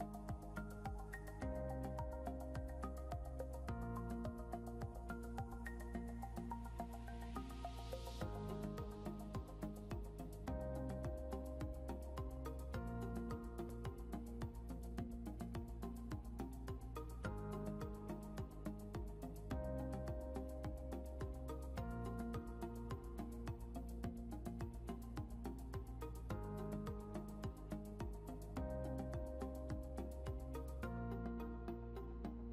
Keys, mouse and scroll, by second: 0.2 scroll down 1, 1.2 click, 2.3 scroll down 1, 3.3 click, 11.2 scroll up 1, 12.8 click, 14.8 scroll down 1, 15.9 click, 19.6 ctrl+l, 20.6 scroll up 1, 21.6 click, 25.9 click, 28.1 ctrl+l, 30.3 click.